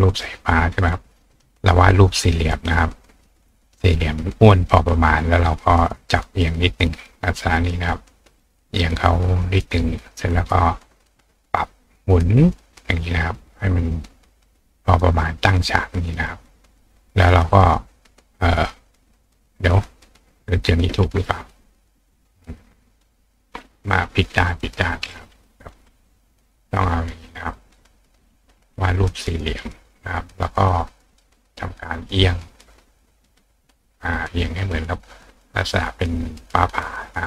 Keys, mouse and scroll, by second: 3.7 click, 4.9 click, 6.4-7.9 drag, 10.0 click, 11.5 click, 12.1-13.6 drag, 13.8 click, 14.3 click, 15.3-23.0 drag, 27.7 click, 28.4-29.7 drag, 31.1 click, 31.9 click, 32.7-34.0 drag, 37.0 click.